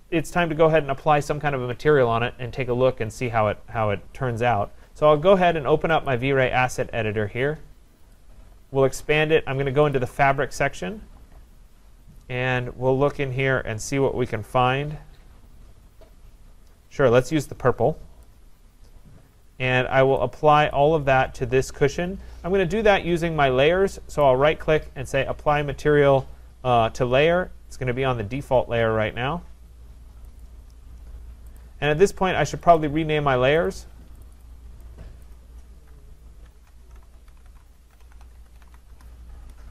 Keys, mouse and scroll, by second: 0.4-3.9 scroll, 4.1-5.4 scroll, 6.1 click, 8.1 click, 9.9 click, 11.5-12.2 scroll, 12.3 scroll, 12.4 middle click, 13.4 middle click, 14.2 middle click, 15.4 middle click, 18.2 click, 20.7 click, 24.2 right click, 30.4 click, 31.6 click, 32.8 click, 33.7 click, 34.5 click, 35.5 click, 36.3-39.2 typing.